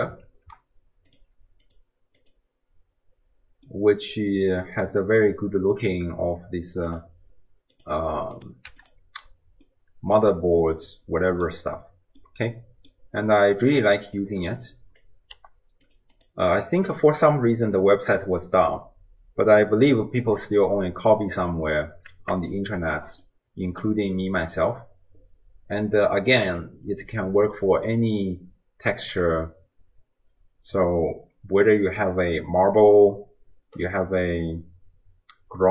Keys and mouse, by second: 0.3 ctrl+t, 1.1-2.7 drag, 3.7-4.9 middle drag, 6.9 click, 8.4 click, 9.8 middle click, 10.9-11.5 middle drag, 12.2-13.0 middle drag, 14.1 click, 14.6-15.0 drag, 15.4 g, 16.2 click, 22.7 shift+middle click, 23.4 middle click, 25.8 click.